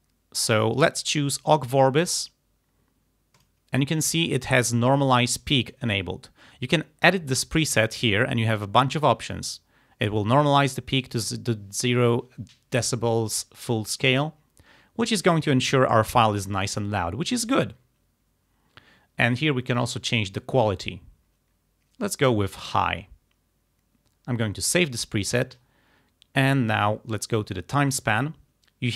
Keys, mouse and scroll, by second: 3.4 click, 7.3 click, 19.8 click, 22.7 click, 24.7 click, 28.0 click.